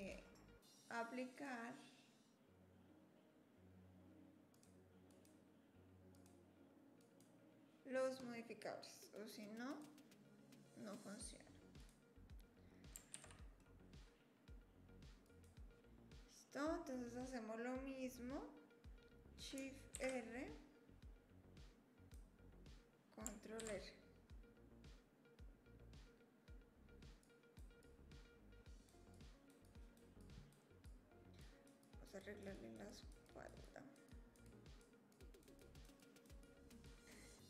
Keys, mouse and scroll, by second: 1.3-3.2 drag, 4.5-5.3 drag, 6.1-7.2 drag, 9.7 click, 13.1 ctrl+s.